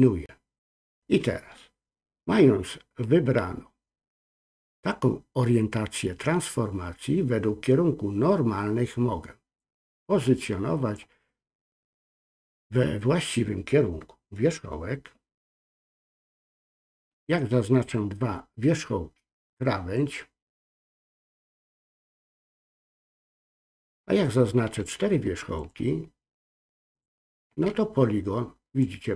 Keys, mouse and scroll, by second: 9.6-11.0 drag, 17.0 shift+click, 19.9-22.4 drag, 25.6 shift+click, 26.9 shift+click, 28.8-29.1 drag.